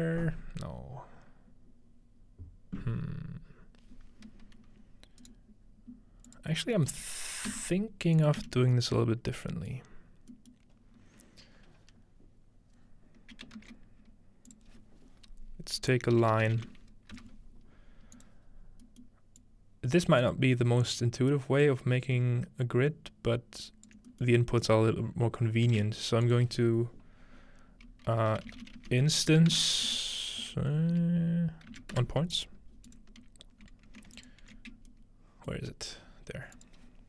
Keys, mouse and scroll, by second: 5.2 right click, 6.3 click, 6.5-6.9 scroll down 1, 6.9-8.3 middle drag, 7.5-8.4 typing, 8.2 click, 9.4 middle click, 9.7 middle click, 10.1-11.2 scroll up 1, 10.5-12.2 middle drag, 11.2-11.5 scroll up 1, 13.6 shift+a, 14.5-16.2 shift+drag, 16.2-17.6 typing, 18.1 click, 18.6-21.0 scroll up 2, 19.0-20.2 middle drag, 19.4 click, 20.4-22.2 middle drag, 21.0-22.8 scroll up 1, 21.6-23.9 drag, 24.1-25.4 ctrl+drag, 24.3-26.3 ctrl+middle drag, 24.5-25.4 scroll up 1, 25.4-25.8 scroll up 1, 25.8 shift+a, 26.3-28.2 drag, 28.3-29.3 typing, 29.6 Return, 31.7 Return, 31.9-32.6 scroll down 1, 32.9-35.4 drag, 34.7-35.6 scroll up 2, 35.0 middle click, 35.6-37.0 alt+shift+middle drag.